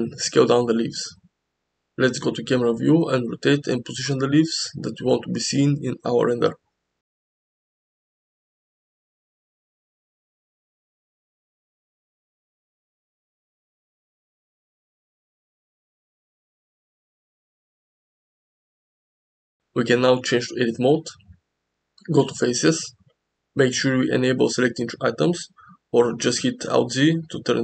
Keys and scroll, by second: 0.0 g, 1.6 KP_0, 3.2 r, 4.7 z, 11.5 s, 12.0 g, 13.2 KP_0, 14.7 r, 15.0 z, 20.4 KP_0, 22.2 Tab, 25.7 alt+z, 26.1 alt+z.